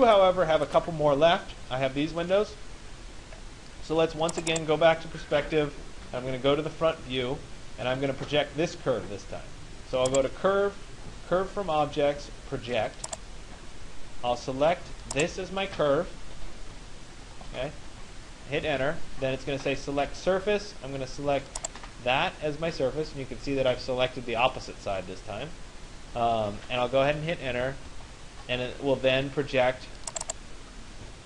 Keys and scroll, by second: 18.3 Return, 29.0 Return.